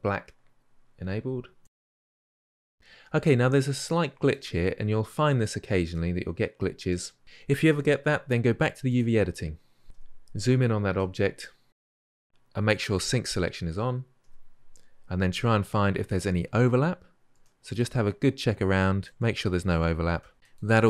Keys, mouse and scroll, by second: 0.7-1.5 scroll down 10, 1.9 drag, 2.1-2.9 middle drag, 2.9-3.7 scroll up 5, 3.7-4.6 shift+middle drag, 4.6-5.2 scroll up 1, 5.2-8.7 middle drag, 8.7-9.8 drag, 9.8 KP_Decimal, 10.8-20.8 middle drag.